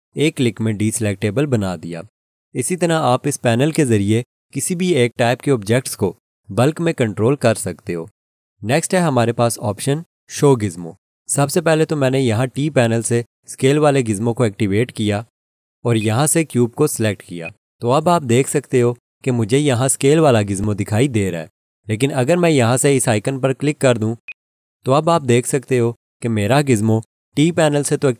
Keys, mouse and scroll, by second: 16.0 click, 20.6 click, 24.3 click.